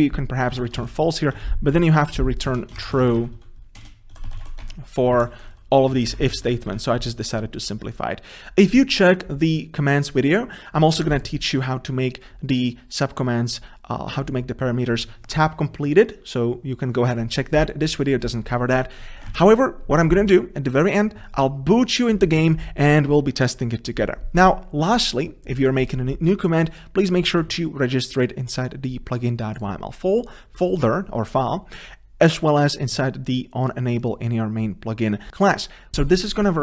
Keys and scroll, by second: 1.6 ctrl+z, 5.8 ctrl+c, 6.1 ctrl+z, 19.6 ctrl+s, 35.9 ctrl+s.